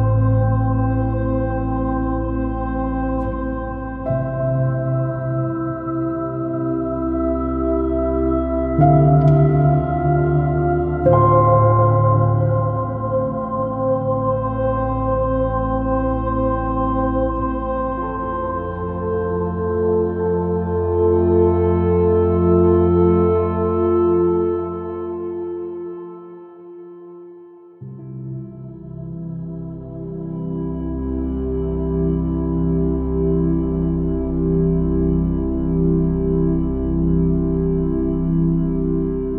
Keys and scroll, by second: 4.0 super+z, 4.6 space, 7.3 super+-, 7.6 super+space, 8.1 super+i, 8.2 super++, 8.4 super+space, 9.4 alt+super+z, 15.0 space, 17.2 space, 19.2 r, 20.1 b, 21.6 space, 23.2 space, 25.1 space, 27.7 r, 28.0 b, 29.7 space, 33.0-33.9 typing, 37.4 super+i.